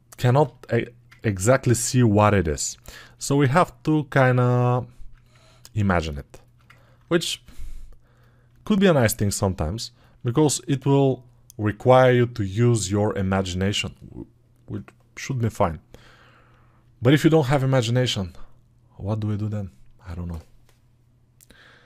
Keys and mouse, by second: 4.6 alt+click, 6.1-21.8 alt+shift+drag.